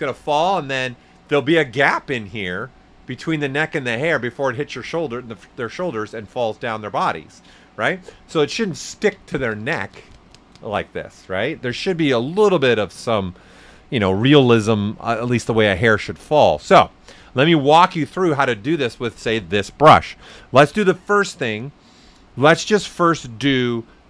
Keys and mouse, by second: 13.4 ctrl+z, 14.4 ctrl+right click, 15.4 ctrl+z, 16.2 alt+right click, 16.7 shift+f.